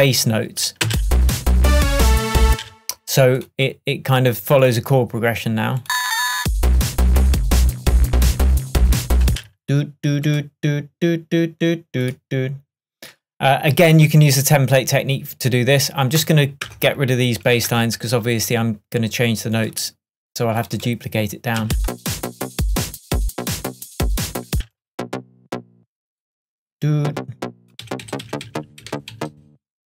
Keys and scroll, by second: 0.9 space, 2.5 space, 9.3 space, 16.7 BackSpace, 21.7 space, 24.6 space, 27.9 Up, 28.9 Down.